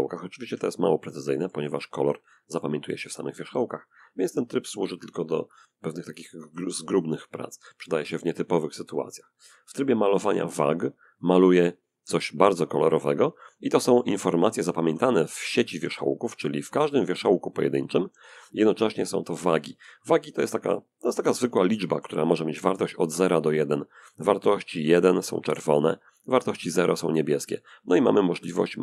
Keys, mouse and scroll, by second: 0.3-2.1 middle drag, 6.2-7.7 drag, 8.2 click, 9.5 click, 10.6-12.3 drag, 14.6 Tab, 15.1 click, 16.0 middle click, 17.4 Tab, 17.8-18.8 middle drag, 19.1-21.6 drag, 23.7-27.2 drag, 27.2 middle click, 27.7 f, 28.2-28.8 drag.